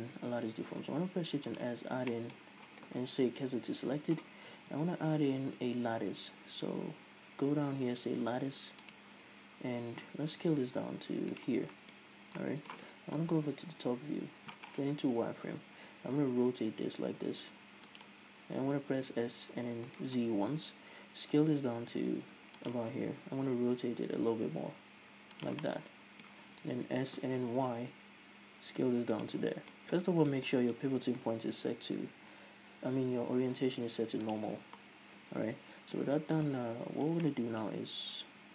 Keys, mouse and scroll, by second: 0.7 shift+s, 2.5 middle click, 3.7 KP_1, 4.6 Tab, 5.1 shift+a, 10.0 scroll down 1, 10.6 s, 11.8 click, 12.1 middle click, 12.4-12.8 scroll up 1, 12.8 middle click, 13.6 KP_8, 15.2-18.4 middle drag, 15.2 z, 15.8-16.6 scroll up 2, 16.6 r, 18.4 click, 18.9 s, 20.4 right click, 20.5 s, 23.1 click, 23.8 r, 25.8 click, 26.1-29.6 middle drag, 26.9 s, 29.6 click, 29.7 z, 30.1-38.5 middle drag, 32.4 ,.